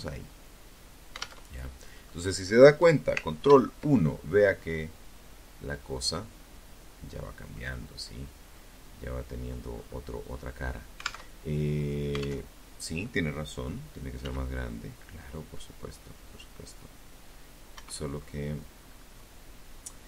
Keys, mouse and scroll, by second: 0.1 click, 1.6 ctrl+KP_1, 2.7-4.1 scroll down 3, 4.1-5.9 middle drag, 6.3-6.7 scroll down 2, 6.7-7.9 middle drag, 7.9-8.5 scroll up 2, 8.5-9.1 scroll up 1, 9.4 alt+Tab, 10.7 alt+Tab, 12.4 s, 15.9 Escape, 17.0-17.5 scroll up 2.